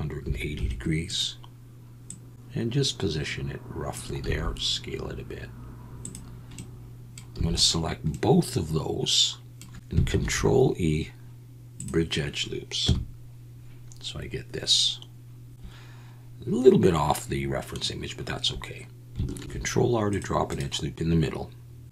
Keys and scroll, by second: 0.0-0.5 typing, 4.2 s, 7.3 a, 10.1 ctrl+e, 12.8 KP_1, 19.4 ctrl+r.